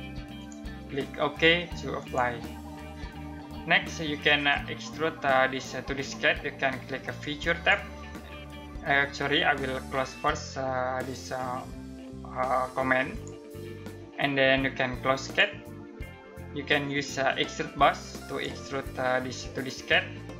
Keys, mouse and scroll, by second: 7.0 click, 16.8 click, 17.8 click.